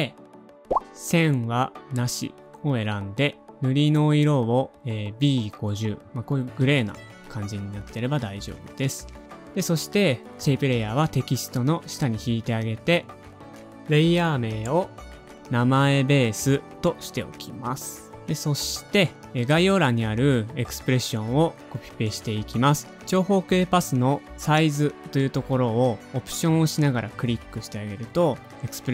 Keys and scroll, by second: 5.3-5.7 typing, 5.7 Return, 13.9-15.0 typing, 16.4-17.2 typing, 22.3 super+c.